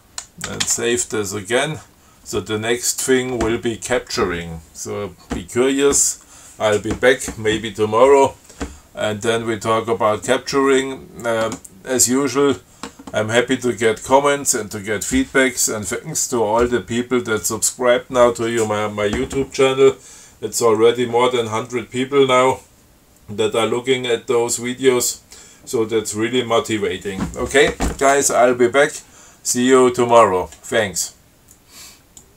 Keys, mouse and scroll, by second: 0.7 ctrl+x, 0.9 ctrl+s.